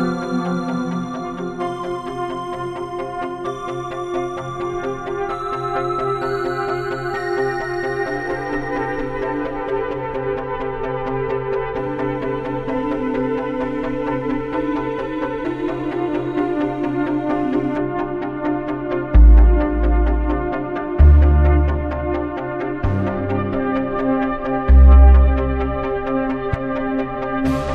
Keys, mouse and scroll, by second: 2.0-6.6 drag, 6.7 click, 10.3-12.7 drag.